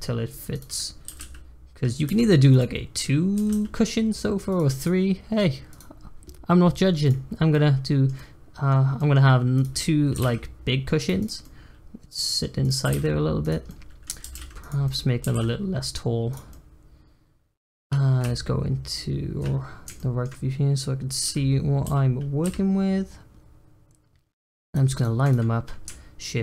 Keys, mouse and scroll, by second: 1.0 g, 3.3 g, 4.7 click, 5.7 click, 7.0 click, 7.5-9.5 middle drag, 9.5 click, 10.1 g, 11.2 click, 11.4-12.5 middle drag, 12.5 click, 12.8 g, 13.6-14.2 middle drag, 14.2 g, 14.8 middle click, 15.2 s, 16.5-18.2 middle drag, 19.6 scroll up 1, 19.9-21.2 shift+middle drag, 21.2 g, 24.9 click, 25.2 click.